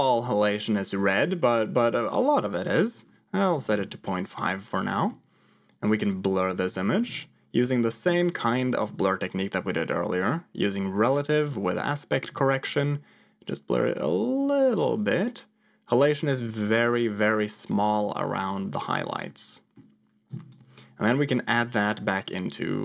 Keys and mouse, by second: 2.7-3.8 drag, 4.8 middle click, 5.7-7.5 drag, 8.7 ctrl+shift+click, 10.1 click, 11.0 click, 11.5 middle click, 12.2-16.4 shift+drag, 17.4 click, 19.2 middle click, 20.5 ctrl+shift+click, 22.1 click, 22.4 click.